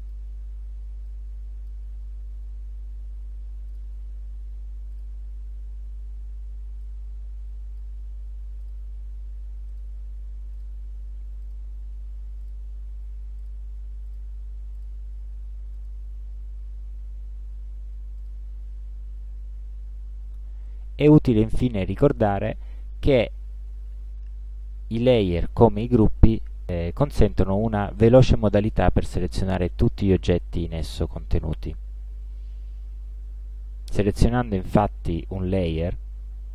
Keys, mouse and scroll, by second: 1.2 click, 3.7 click, 5.0 click, 6.9 click, 8.7 click, 9.8 click, 10.6 click, 11.5 click, 12.5 click, 13.5 click, 14.1 click, 14.8 click, 15.8 click, 18.3 click, 20.7 middle click, 35.6 click.